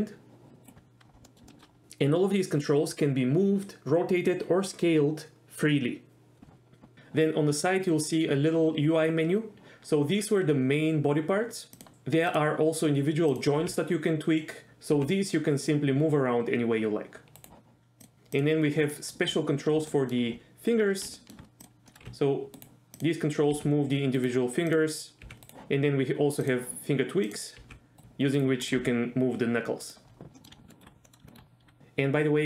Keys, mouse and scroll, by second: 0.6 right drag, 1.2 middle click, 1.5 shift+middle drag, 12.3 click, 13.6 g, 14.9 g, 17.4 right click, 18.0 click, 18.4 click, 19.0 middle click, 19.9 shift+middle drag, 21.2 shift+middle click, 21.9 middle click, 22.0 g, 22.6 right drag, 23.6 g, 24.1 right click, 25.2 g, 25.4 right click, 27.6 g, 28.0 right click, 28.0 g, 28.4 right click, 28.7 click, 28.8 g, 29.8 right click, 30.4 middle drag, 30.7 shift+middle drag, 31.0 middle click, 31.3 shift+middle click, 31.8 g.